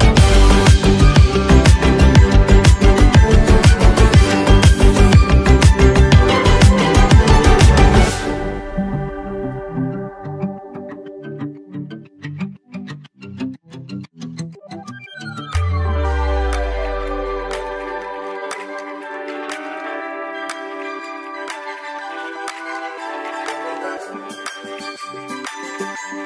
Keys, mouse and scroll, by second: 0.9 click, 1.8 alt+scroll up 1, 2.5 space, 2.6 click, 4.3 space, 4.4 click, 6.0 space, 6.6 click, 6.7 space, 7.0-8.6 drag, 8.6 space, 9.1 click, 9.9 space, 10.0 click, 10.9 space, 11.1 click, 12.7 space, 12.9 click, 13.2 space, 13.3-16.9 drag, 16.9 right click, 17.6-21.0 drag, 20.9-21.6 typing, 22.5-26.2 drag.